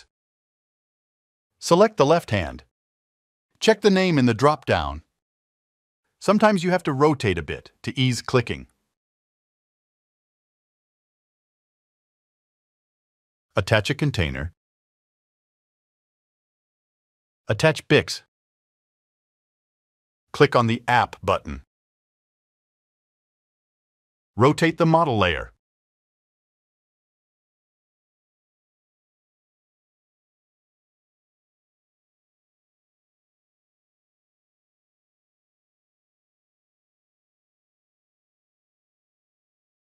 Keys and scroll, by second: 8.3 alt+2, 34.4 0, 37.4 9, 38.2 0.